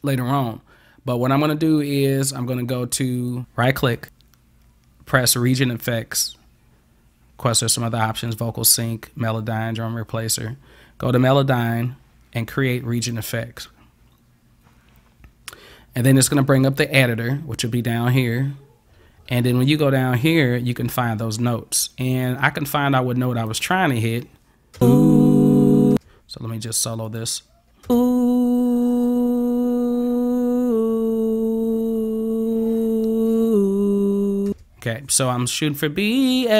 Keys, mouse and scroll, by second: 3.2 click, 4.0 click, 13.1 click, 18.4 scroll up 1, 18.9-19.4 scroll down 5, 19.9 scroll down 1, 20.4 click, 20.6-21.1 scroll up 6, 21.6 scroll up 1, 23.5 click, 24.8 space, 26.0 space, 27.1 click, 27.9 space, 34.6 space.